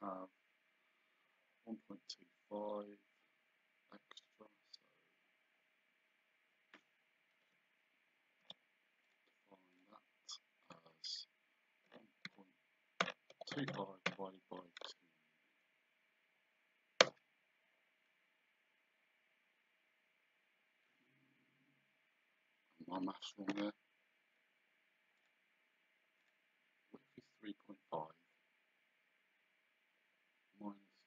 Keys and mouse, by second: 7.5 Escape, 8.4 d, 9.1 click, 11.9 KP_1, 13.0 BackSpace, 17.0 Return, 25.2 click.